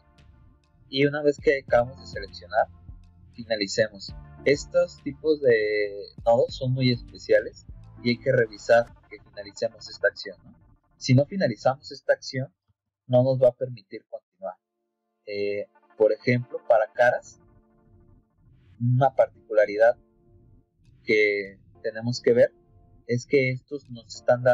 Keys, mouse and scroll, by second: 14.3 middle click, 16.1 click, 17.1-17.6 scroll up 4, 17.6 middle click, 18.0 middle click, 19.2 click.